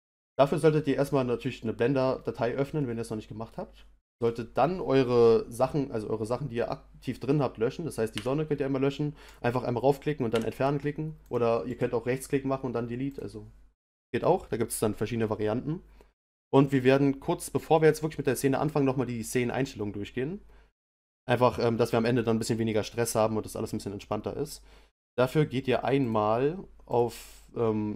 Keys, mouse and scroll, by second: 2.2-4.1 middle drag, 4.1 click, 8.1 Delete, 9.2 click, 10.3 Delete, 11.2 click, 11.7-14.7 right drag, 26.0 click, 26.9 click.